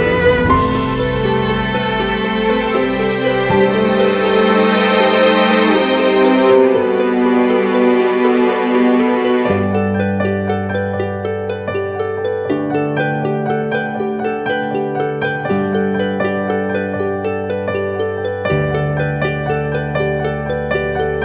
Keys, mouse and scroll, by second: 17.0 alt+click.